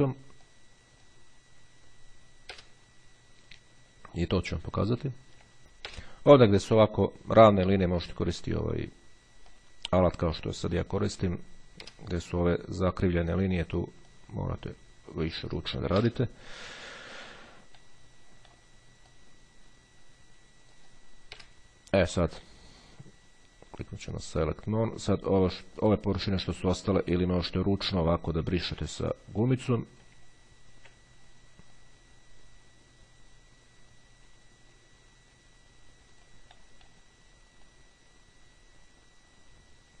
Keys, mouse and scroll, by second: 1.5 click, 2.6 Delete, 4.7-5.0 shift+scroll down 1, 5.6 click, 6.1 Delete, 9.7-12.0 drag, 12.0 Delete, 14.2-16.0 drag, 16.2 Delete, 18.0-21.8 drag, 21.6 Delete, 24.3 click, 26.0 click, 27.0-30.5 drag, 30.5-31.4 ctrl+scroll up 1, 32.0-36.9 drag, 37.8-40.0 drag.